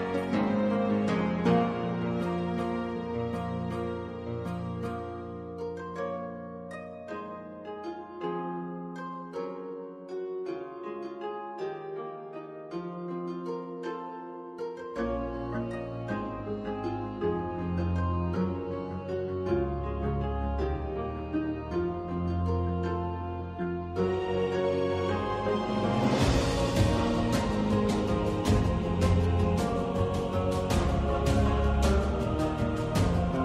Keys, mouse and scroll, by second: 0.0 ctrl+c, 0.2 ctrl+v, 0.9-1.8 drag, 3.1 ctrl+c, 3.3 ctrl+v, 4.0-4.8 drag, 6.2 click, 7.1 click, 7.8 click, 9.4 click, 10.9-11.5 drag, 12.4 shift+a, 14.7 click, 15.9 click, 16.8 click, 17.3 click, 17.8 click, 18.5 click, 20.0 Tab, 20.4 click, 21.2 a, 23.4 a, 24.6 Tab, 25.2 Tab, 25.4 click, 26.3 a, 27.2 alt+a, 28.1 click, 28.4 Tab, 28.9 click, 29.6 click.